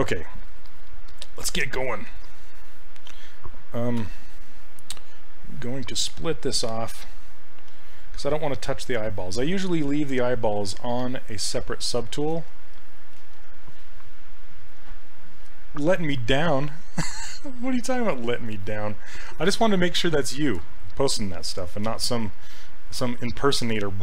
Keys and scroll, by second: 4.0 2, 23.1 s.